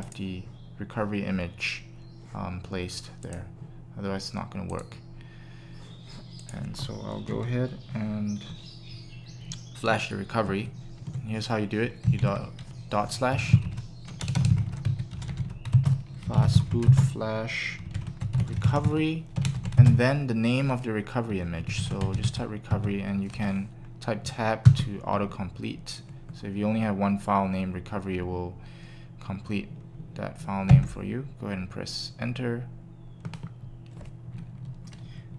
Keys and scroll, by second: 13.4-14.1 typing, 15.5-18.4 typing, 19.6 typing, 21.4-22.3 typing, 24.6 Tab, 30.7 Return.